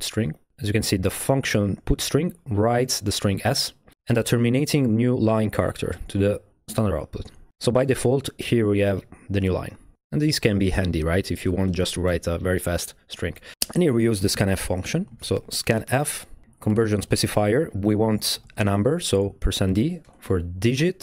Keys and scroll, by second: 8.5 Right, 8.7 Right, 9.0 Left, 13.8-16.8 typing, 17.1 Left, 18.0 shift+5, 18.3 d, 19.4-21.0 typing, 20.3 Right.